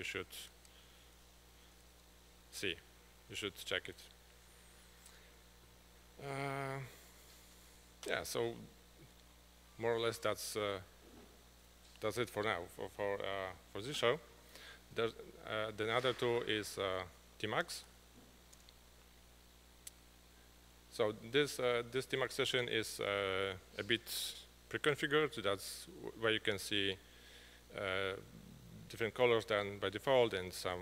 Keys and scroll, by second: 0.1-2.4 typing.